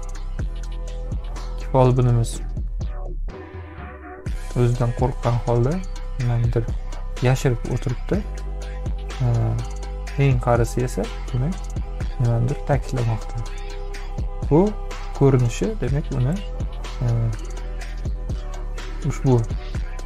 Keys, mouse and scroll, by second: 2.9 space, 3.1-4.2 drag.